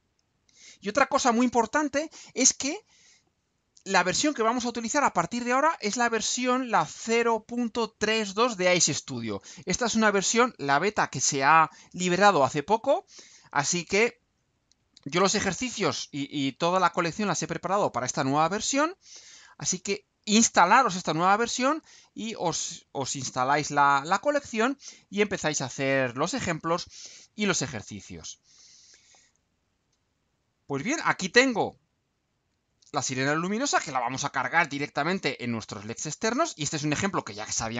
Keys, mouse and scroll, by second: 29.4 click, 32.5 ctrl+u.